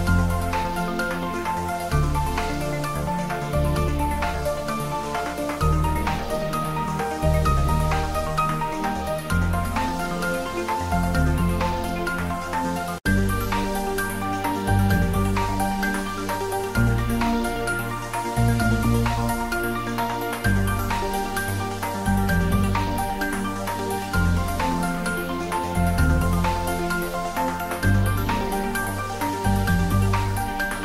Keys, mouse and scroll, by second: 1.3 click, 3.9 ctrl+middle click, 4.5 click, 8.1 ctrl+middle click, 9.4-11.3 drag, 12.9 click, 14.9 middle click, 15.6 click, 17.1 click, 20.2 click, 22.8 click, 24.6-25.9 scroll down 1, 26.3 click, 27.6 click, 28.0 ctrl+s, 29.8 click.